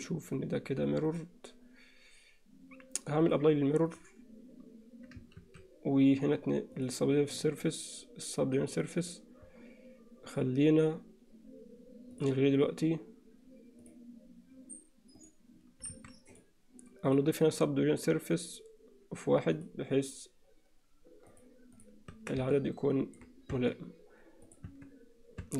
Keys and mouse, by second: 1.1 click, 3.2-4.0 drag, 5.4 ctrl+s, 6.8 click, 9.0 click, 12.2 click, 15.2 click, 16.0 alt+a, 17.1-19.7 drag, 21.5 click, 22.2 Tab, 22.6 alt+middle click, 24.5 Tab, 24.5 click, 25.4 Tab.